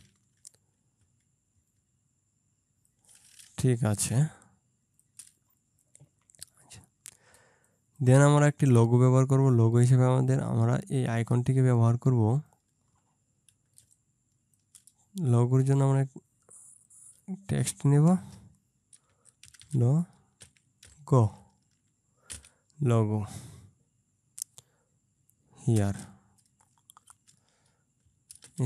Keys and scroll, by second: 1.2 Right, 1.6 Right, 4.2 ctrl+space, 7.4 ctrl+space, 13.9 ctrl+space, 18.3 BackSpace, 19.5 shift+l, 19.7 shift+o, 20.5 g, 27.2 space, 28.5 shift+h.